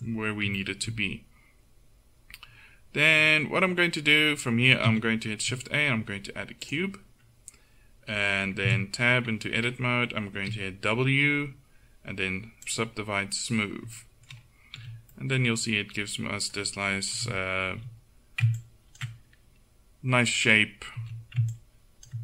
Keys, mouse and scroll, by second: 4.9 shift+a, 8.7 Tab, 10.4 w, 14.8 a, 17.2 KP_1, 17.8 z, 18.6-20.3 drag, 21.1 a, 21.6-22.2 drag.